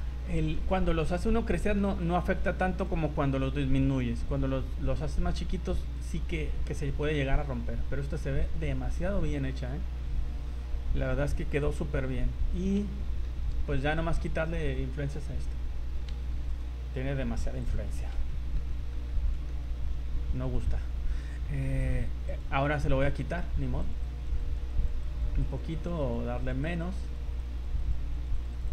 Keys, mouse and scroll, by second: 0.2 scroll up 2, 0.6 middle click, 1.5 shift+middle click, 2.8 click, 7.1 middle click, 10.1 ctrl+z, 12.3-12.7 scroll up 3, 13.0 shift+middle click, 13.4 middle click, 13.7-14.0 scroll up 2, 16.1 v, 16.5 right click, 17.6 click, 18.3 shift+middle click, 18.7 middle click, 19.1 shift+middle click, 19.5 middle click, 19.8 scroll down 3, 20.1 scroll up 2, 21.8 click, 22.3 click, 23.3 scroll up 2, 23.8 click, 24.0 click, 24.4 click, 24.8 click, 25.0 click, 25.4 click, 25.8 click, 26.0 click, 26.4 click, 26.6 click, 27.0 click, 27.4 click, 27.8 click, 28.1-28.7 click, 28.3 click, 28.6 click.